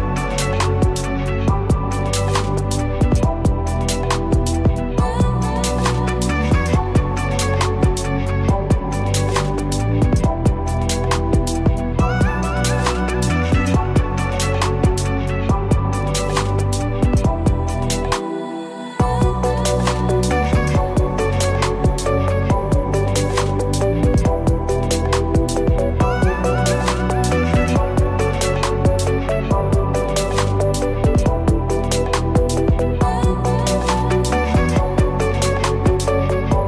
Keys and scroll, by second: 1.1 ctrl+g, 18.5 ctrl+g.